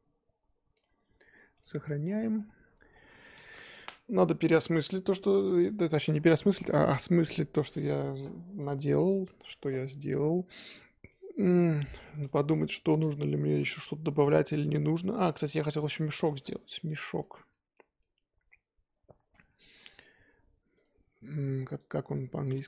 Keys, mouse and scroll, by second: 2.0-2.9 scroll down 6, 2.9-3.9 scroll down 5, 9.2-11.1 scroll up 5, 11.1-12.2 shift+middle drag, 12.2 scroll up 1, 12.2-22.6 middle drag.